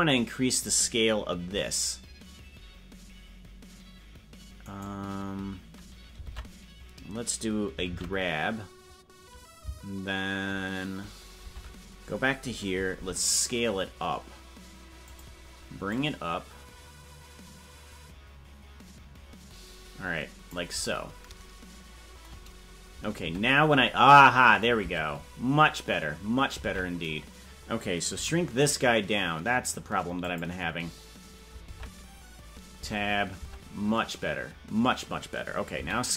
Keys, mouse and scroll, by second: 1.5 s, 15.9-20.6 drag, 23.3 Tab, 25.4 Tab, 26.7 ctrl+Tab, 33.0 Tab, 34.0 Tab.